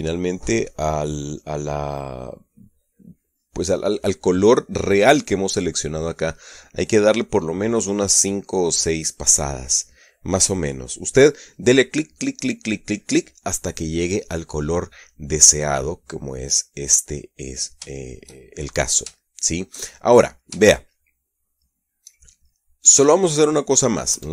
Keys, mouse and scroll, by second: 17.0-18.5 middle drag, 18.5-22.9 shift+drag, 23.1 shift+click, 23.9-24.3 middle drag.